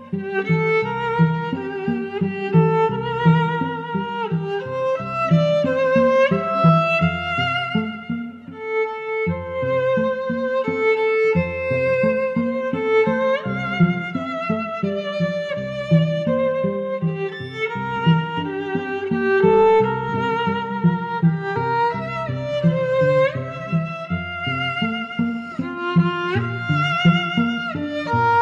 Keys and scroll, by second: 17.5 i.